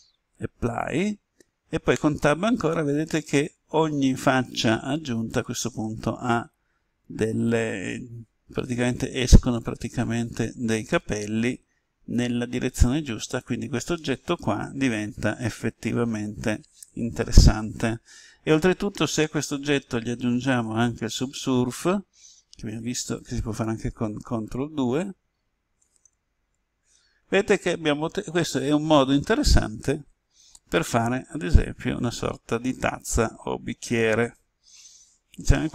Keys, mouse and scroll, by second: 0.5 click, 1.9 Tab, 2.6-5.7 middle drag, 7.4-9.7 drag, 10.9-15.7 middle drag, 19.4 click, 24.7 ctrl+2, 26.3 ctrl+2, 27.7-35.7 middle drag.